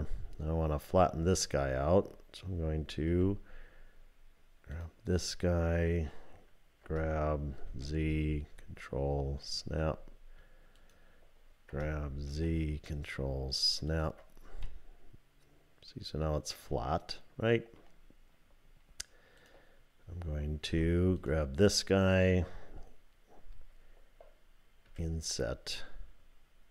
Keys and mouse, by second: 0.6 click, 3.1 1, 6.8 g, 9.4 ctrl+click, 11.7 g, 14.7-17.8 middle drag, 19.4 click, 20.7 3, 24.9 i.